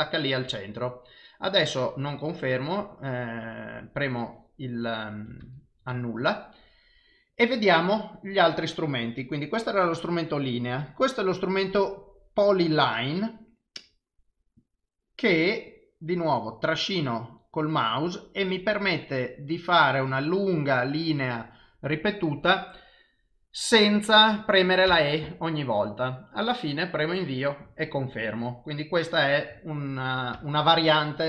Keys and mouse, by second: 3.8 right click, 5.4 ctrl+z, 11.0 click, 14.6 click, 15.7 click, 30.4 ctrl+z.